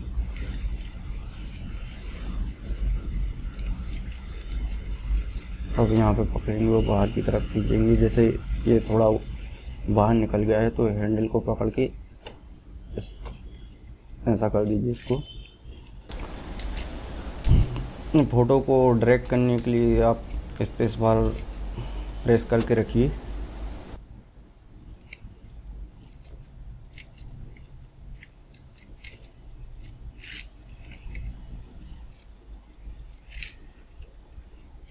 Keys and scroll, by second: 23.9 space.